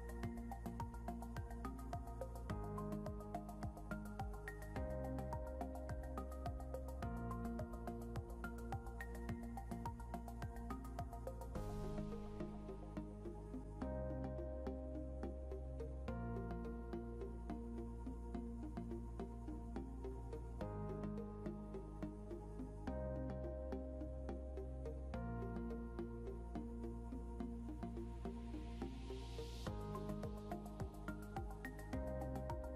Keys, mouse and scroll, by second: 5.3 scroll down 1, 5.8 scroll up 1.